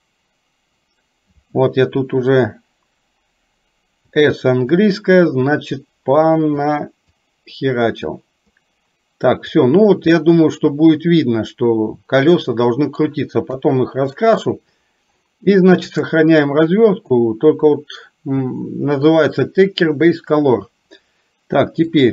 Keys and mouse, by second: 4.0 s, 4.8-6.7 drag, 7.2-9.6 drag, 10.3-13.0 middle drag, 13.7 KP_3.